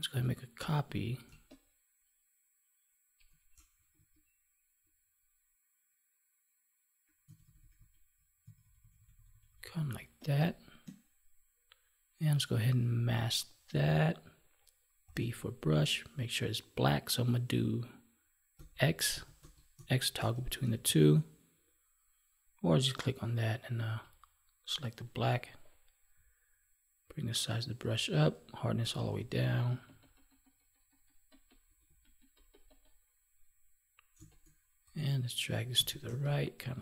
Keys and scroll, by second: 0.5 ctrl+j, 9.9 space.